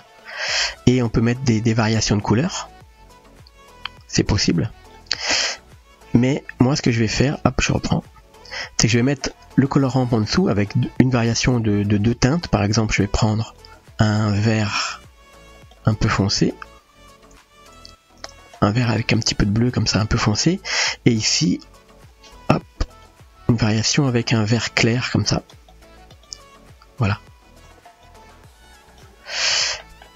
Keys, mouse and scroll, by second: 0.9-1.7 drag, 2.4 click, 6.8-7.7 drag, 8.1-9.3 drag, 10.4 middle click, 12.0 click, 12.6 click, 13.4 click, 22.1 click, 27.6-28.1 drag, 28.6-29.0 drag, 30.0 middle click.